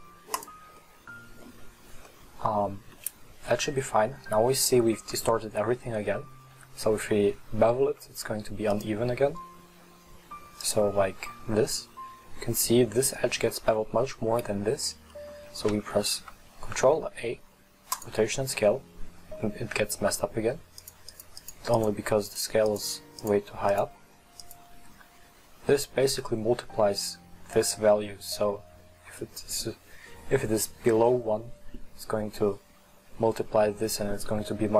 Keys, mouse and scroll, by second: 0.9-5.2 middle drag, 8.8-11.5 drag, 11.5-12.0 scroll up 2, 12.0-14.9 middle drag, 15.2 middle click, 15.9 ctrl+a, 20.8-25.7 drag, 28.3 right click, 30.2-32.4 right drag, 32.8 right click.